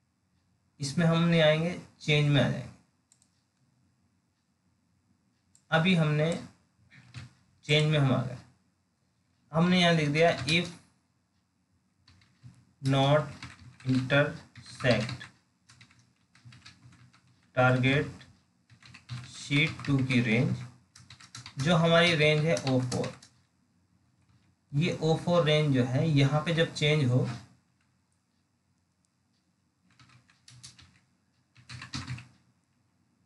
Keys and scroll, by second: 24.2 alt+Tab.